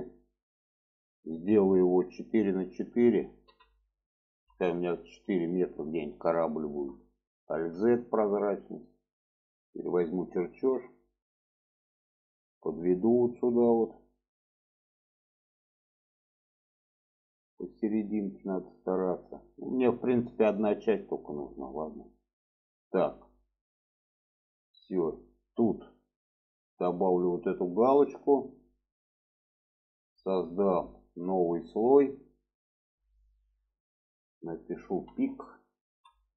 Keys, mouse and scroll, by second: 6.6 shift+middle click, 8.2 shift+middle click, 9.2 click, 10.7-19.4 drag, 20.8-21.2 shift+middle drag, 26.3-28.7 drag, 31.3 click, 32.5-36.3 drag.